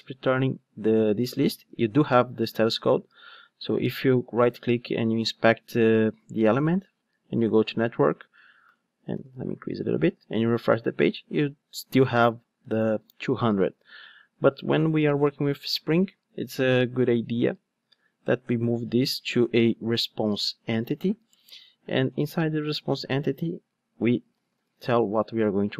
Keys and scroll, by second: 21.4 Return.